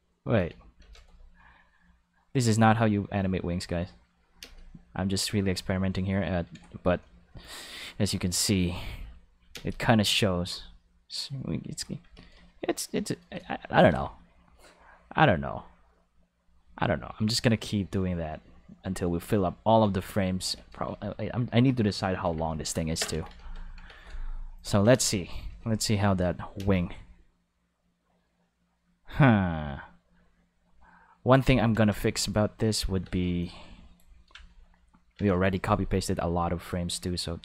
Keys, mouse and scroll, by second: 0.8 shift+d, 3.5 click, 4.1 click, 4.4 space, 5.3-5.9 ctrl+middle drag, 6.2 ctrl+middle click, 8.5-9.9 drag, 9.5 space, 10.0 click, 12.0 a, 13.7 shift+d, 16.5 click, 17.2-19.2 ctrl+middle drag, 20.4 a, 23.1 ctrl+s, 24.5 click, 24.9 ctrl+space, 25.4 alt+a, 26.5 space, 31.7 space, 32.2 click, 33.0 space, 33.4-33.9 drag, 36.0 Tab.